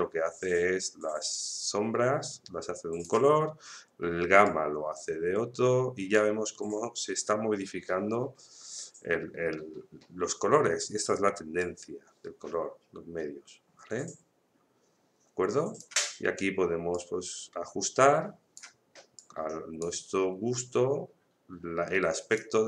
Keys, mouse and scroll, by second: 11.6-22.6 drag.